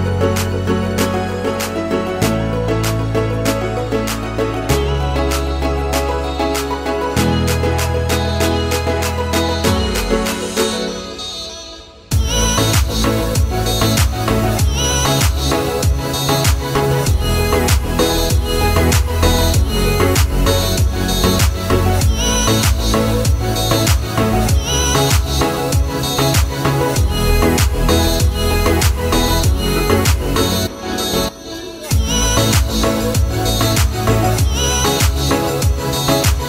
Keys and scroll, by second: 9.3 2, 9.8 Return.